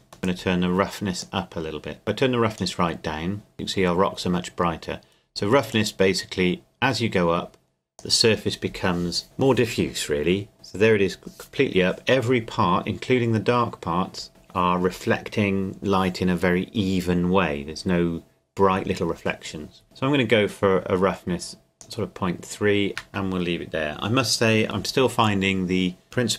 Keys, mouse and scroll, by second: 0.2 click, 5.7 click, 19.8-22.9 drag, 22.9 shift+middle click, 23.4 scroll down 1, 26.0 shift+middle click.